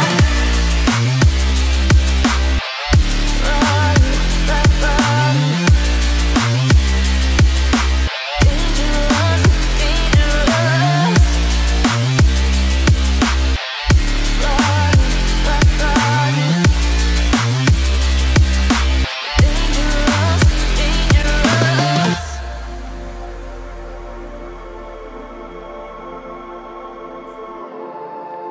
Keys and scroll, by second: 11.9 Escape.